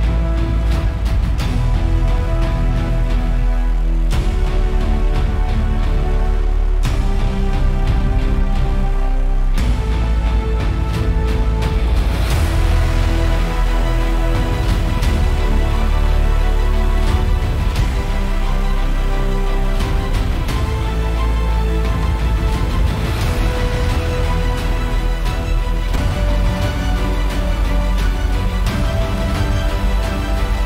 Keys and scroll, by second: 1.9 0, 2.0 Return.